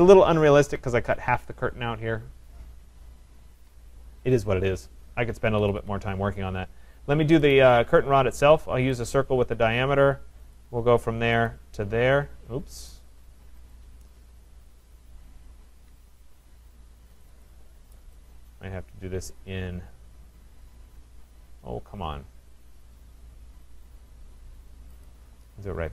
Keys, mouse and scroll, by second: 1.6 middle click, 2.5-2.9 scroll, 5.6 Escape, 5.8 Escape, 7.5 right click, 9.1 click, 10.6 click, 11.5 click, 12.9 right click, 13.7 click, 17.5 click, 25.1 click.